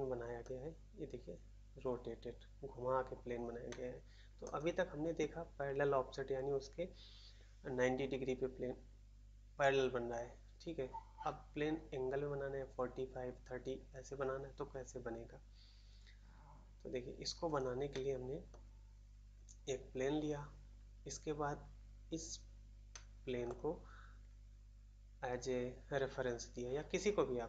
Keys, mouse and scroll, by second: 0.4 middle click, 1.9-2.5 scroll up 1, 3.6 middle click, 4.4 middle click, 17.9 middle click, 18.4 middle click, 22.8 middle click, 23.4 middle click.